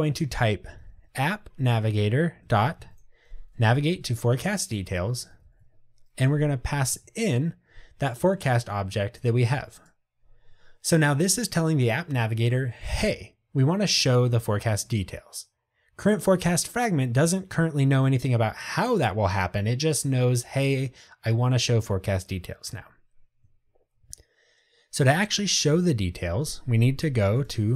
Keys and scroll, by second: 1.7 Tab, 6.5 Return, 7.0 Tab, 27.2 super+o.